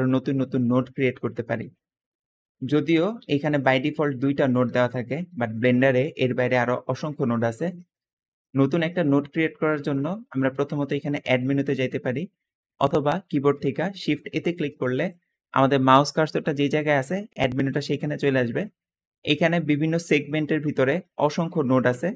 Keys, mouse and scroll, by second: 0.5 middle click, 0.8-1.6 scroll up 2, 1.2 middle click, 1.8-2.7 scroll down 2, 2.1 middle click, 3.1 g, 4.1 click, 4.5 g, 7.7 middle click, 8.3 middle click, 8.8 middle click, 14.2 shift+a, 14.3 shift+a.